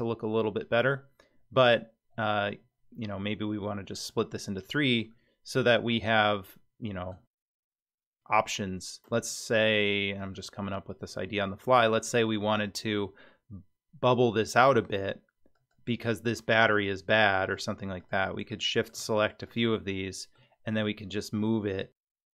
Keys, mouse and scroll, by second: 5.1-7.2 middle drag, 7.4-8.1 scroll up 1, 8.1 scroll up 2, 8.3 middle click, 9.7 middle click, 10.4 scroll up 1, 10.9-11.5 scroll down 2, 11.5 middle click, 14.1 middle click, 15.5 click, 16.7 shift+click, 17.4 shift+click, 18.0 shift+click, 18.5 middle click, 19.5 shift+click, 19.9 middle click, 20.8 g.